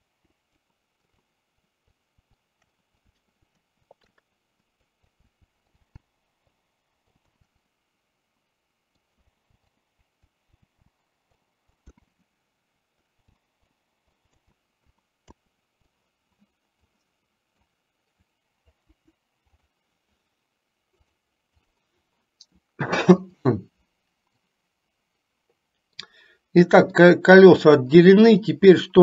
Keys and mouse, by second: 0.3 Delete, 1.1 click, 1.9-2.3 drag, 2.4 shift+middle click, 2.9 click, 3.5 KP_7, 3.9 shift+middle click, 4.8 click, 5.7 click, 6.0 k, 7.7-9.0 middle drag, 9.6 k, 10.8 k, 12.1 middle click, 13.3 k, 14.5 middle click, 15.3 KP_7, 16.0 click, 17.0 click, 18.9 Delete, 21.1 click, 23.6 drag, 24.5-25.8 middle drag, 26.1 middle click, 27.2-28.2 middle drag, 28.9-29.0 middle drag.